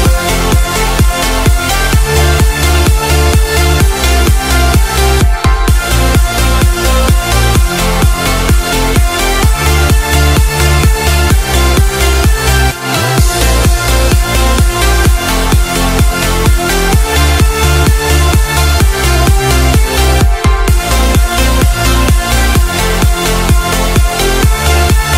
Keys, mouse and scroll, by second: 0.0-1.3 typing, 1.4 Return, 2.3 click, 4.0-5.9 typing, 6.4 click, 7.1 right click, 7.6 scroll up 1, 8.5 right click, 9.1 click, 9.8-11.4 typing, 12.3 shift+Up, 12.5 shift+Up, 12.7 Return, 13.8 click, 14.5-17.7 typing, 18.3 click, 19.2 F10, 20.2 click, 22.5 KP_2, 22.7 KP_0, 23.6 Return, 24.8 click.